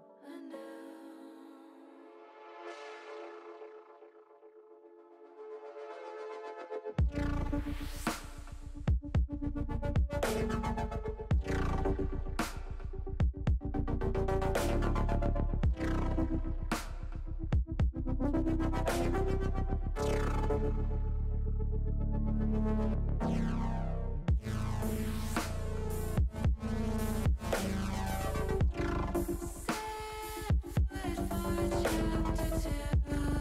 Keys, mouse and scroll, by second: 2.4 click, 3.5 middle click, 6.2 middle click, 8.2 middle click, 10.3 ctrl+alt+KP_0, 13.5 shift+a, 16.8 shift+a, 20.3 click, 21.0 Tab, 21.6 shift+a, 26.2 ctrl+alt+KP_0, 28.4 middle click, 31.5 click, 33.1 click.